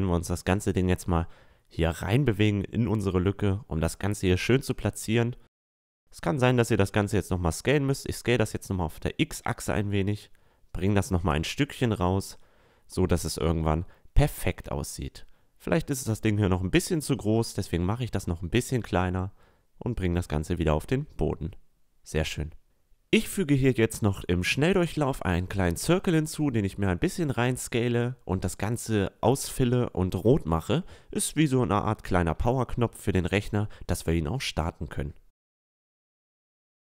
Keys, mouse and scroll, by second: 1.9-6.2 drag, 6.3 s, 9.4 click, 14.3 a, 15.3-17.3 drag, 15.6 s, 17.5 s, 19.5-20.8 drag, 20.7 a, 23.1 s, 23.3 a, 23.9 right click, 24.0 Tab, 24.1 Tab, 25.1-25.6 drag, 25.6 s, 26.0 Tab, 26.1 f, 26.3 Tab, 29.5 r, 30.1 s, 30.6 drag, 31.0 middle drag, 31.3 click, 31.6 s, 32.0 click, 32.3 r, 32.8 click, 33.8 Tab, 33.9-36.4 typing, 34.3 Tab, 34.9 Tab, 35.0 Tab, 36.3 Tab, 36.3 Tab.